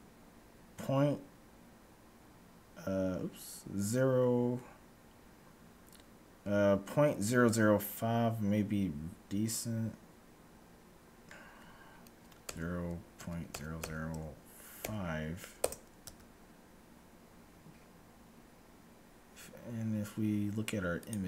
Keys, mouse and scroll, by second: 16.0 Tab.